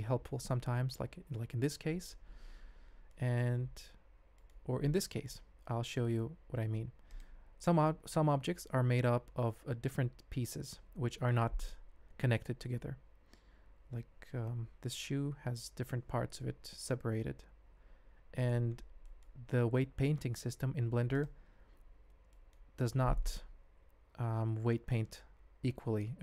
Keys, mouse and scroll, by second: 3.1 shift+drag, 4.0 alt+a, 5.2-5.9 middle drag, 7.1 click, 13.3 Tab, 13.9 alt+a, 15.0 l, 16.7 l, 17.5 g, 19.0 middle click, 19.7 ctrl+Tab, 21.1 click, 21.7 h, 22.3 shift+click.